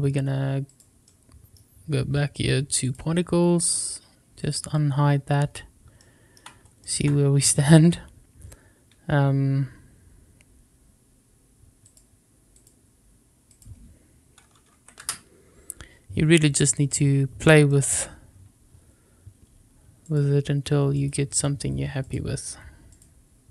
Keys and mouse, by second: 1.0-1.5 middle drag, 2.8 click, 4.3 click, 5.9-6.3 shift+middle drag, 6.7 shift+middle click, 11.8 click, 12.5 click, 13.5-15.7 drag, 17.6 shift+middle click, 20.1-21.0 drag, 22.0-22.9 drag.